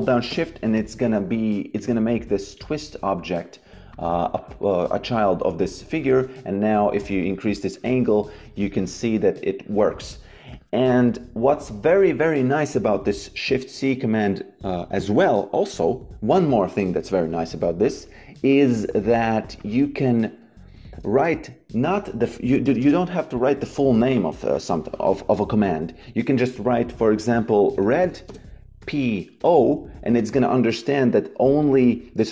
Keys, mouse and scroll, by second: 0.2 shift+Return, 1.7 click, 3.8 click, 5.9 click, 10.4 click, 11.0 Delete, 17.8 click, 21.1 shift+c, 22.6 BackSpace, 27.5 r, 28.2 space, 28.7 p.